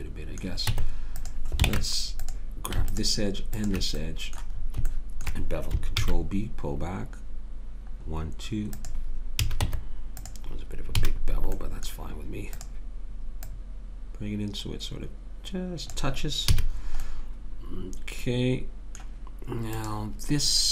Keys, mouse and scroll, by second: 0.7 Tab, 1.7 ctrl+Tab, 2.9-4.1 drag, 6.0 ctrl+b, 9.4 a, 9.6 Tab, 11.0 a, 12.6-15.0 drag, 16.5 a, 19.7-20.7 drag.